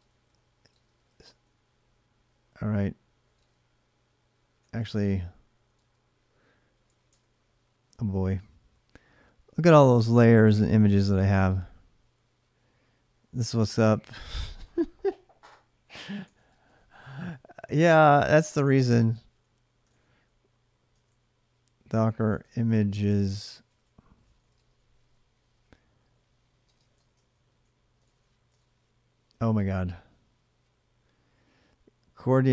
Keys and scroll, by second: 0.0-1.4 typing, 2.8-6.6 typing, 6.9 Return, 15.5-16.7 typing, 17.8-28.3 typing, 19.7 Return.